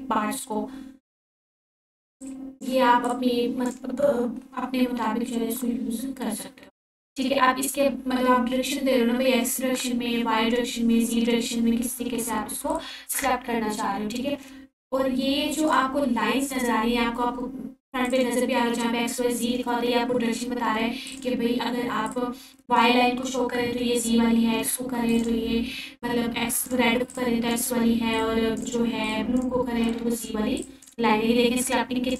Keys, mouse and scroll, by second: 0.4-3.3 drag, 3.4-4.0 alt+drag, 13.9-17.0 drag, 19.9-21.1 scroll up 1, 21.1 f, 22.3-24.2 drag, 30.5-30.8 click.